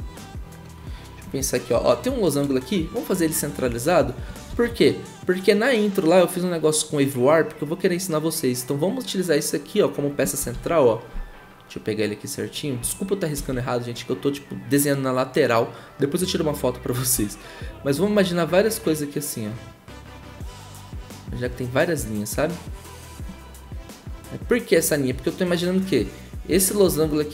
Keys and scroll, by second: 4.5 ctrl+z, 10.5 ctrl+z, 13.3 ctrl+z.